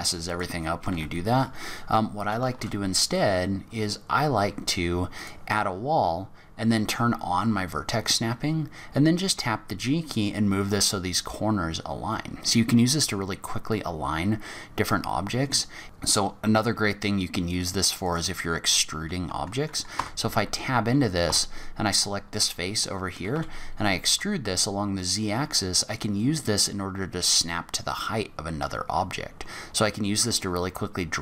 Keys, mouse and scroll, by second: 0.2 click, 0.9 Delete, 2.5 shift+a, 9.2 g, 11.0-11.5 scroll up 4, 13.1 scroll down 3, 15.0 scroll down 2, 15.8-16.4 scroll down 1, 16.4 scroll up 2, 18.0 click, 19.9 Tab, 21.2 3, 21.9 click, 23.3 e.